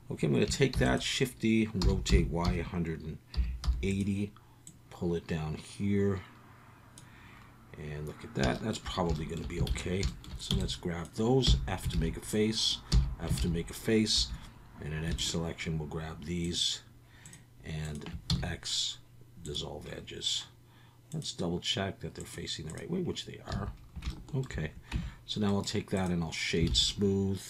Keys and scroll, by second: 0.7 shift+d, 1.8-3.6 typing, 9.7 alt+a, 10.5 b, 11.4 f, 11.9 alt+a, 12.9 f, 13.4 alt+a, 14.1 2, 18.3 x, 23.5 a, 24.9 Tab, 26.7 alt+a.